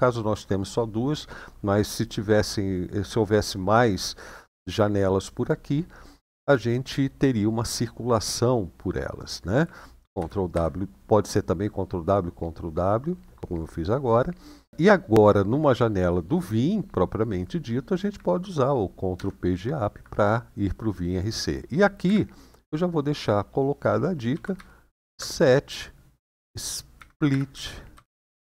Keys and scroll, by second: 10.0 ctrl+w, 10.3 ctrl+w, 18.9 ctrl+Page_Up, 21.8 typing, 24.0-24.8 typing, 26.1-28.5 typing.